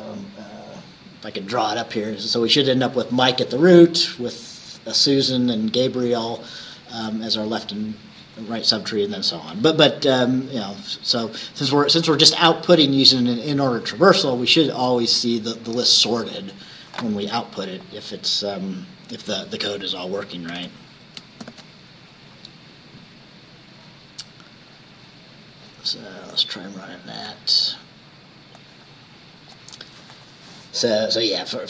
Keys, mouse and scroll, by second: 4.4-9.2 drag, 17.9 click, 20.5 ctrl+s, 21.5 ctrl+shift+b, 26.7 click, 28.6-29.8 drag.